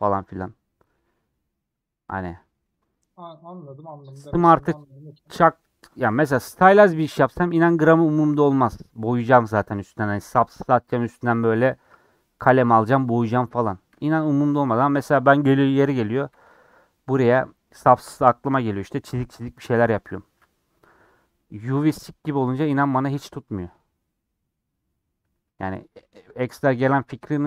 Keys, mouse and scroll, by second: 2.2-3.1 scroll down 7, 3.1 scroll up 2, 3.4-3.7 scroll down 1, 14.4-15.7 middle drag, 15.7 scroll up 2, 16.6-18.5 scroll up 8, 21.3-25.3 middle drag, 25.3 Tab, 25.7-26.1 scroll down 2, 27.0 scroll down 8, 27.3-27.4 middle drag.